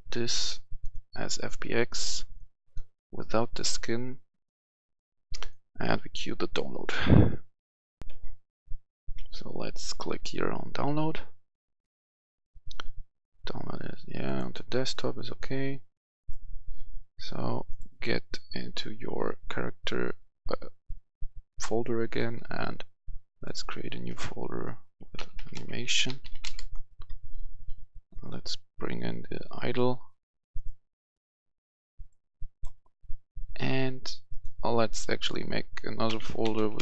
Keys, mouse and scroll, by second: 8.0 F11, 8.0 F10, 8.9-17.1 drag, 17.9 click, 22.1-23.1 right drag, 23.2 click, 24.9-26.3 typing, 26.5 Return, 28.0-30.1 drag, 34.2 right click, 35.2 click, 36.0-36.8 typing.